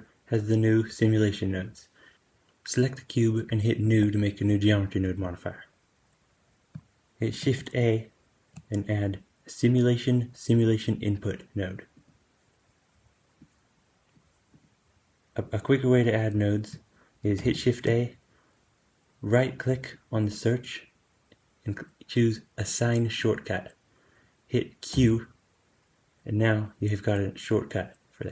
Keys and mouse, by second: 7.3 shift+a, 13.3-14.5 drag, 17.3 shift+a.